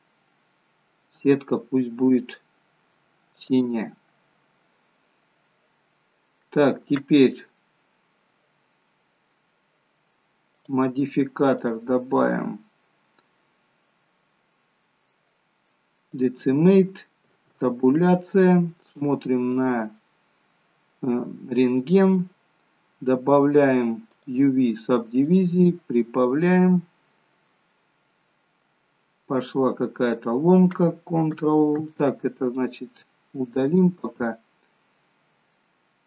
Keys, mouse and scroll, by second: 10.6 click, 11.6 click, 17.3 Tab, 19.6 click, 21.3-22.7 scroll up 2, 21.8 middle click, 24.2 click, 26.3 middle click, 27.0-28.2 scroll down 3, 27.4 middle click, 29.7 scroll up 1, 30.0 middle click, 33.5 click.